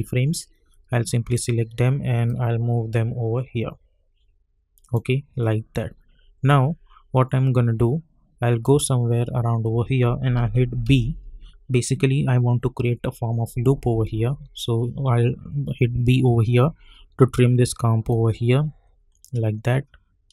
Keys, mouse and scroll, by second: 5.3 scroll up 1, 6.4-10.8 drag, 10.9 b, 18.1-20.3 drag.